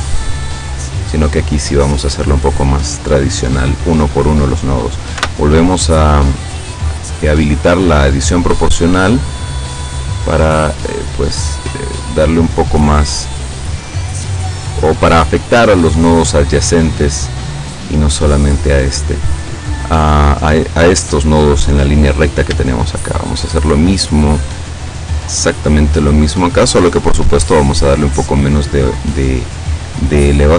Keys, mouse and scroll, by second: 0.2-1.7 middle drag, 5.2 o, 8.4 click, 9.0-9.5 scroll up 2, 9.5-10.0 scroll down 2, 10.2 scroll down 2, 11.1 scroll down 1, 11.8-12.2 scroll up 1, 12.5 scroll up 1, 14.8-16.8 middle drag, 16.9-19.0 middle drag, 19.2-19.7 scroll up 1, 22.2 right click, 22.7 shift+right click, 23.1 shift+right click, 23.7 shift+right click, 24.4 shift+right click, 25.1 shift+right click, 25.9-27.4 shift+middle drag, 28.1-29.4 drag, 29.4-29.9 scroll up 2, 30.2-30.5 scroll up 2.